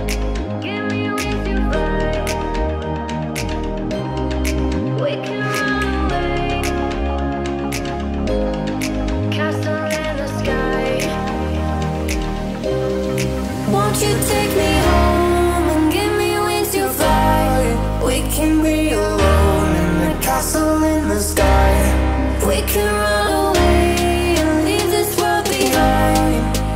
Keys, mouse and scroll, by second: 0.6-2.2 shift+drag, 2.2 ctrl+x, 2.7-3.1 scroll up 1, 3.8 middle click, 4.5 p, 4.7 click, 5.6-7.1 typing, 6.4 Return, 6.9 click, 7.3 scroll down 1, 8.8 click, 10.0-10.4 scroll up 1, 10.4 right click, 11.1 click, 12.4-12.8 scroll up 1, 12.8 p, 13.3 click, 15.9 Escape, 16.4 click, 18.3 ctrl+z, 18.7 click, 20.4 ctrl+z, 20.9 shift+middle click, 21.7 click, 22.4-22.8 typing, 23.0 Return, 23.4 click, 25.5-26.7 typing, 26.5 click.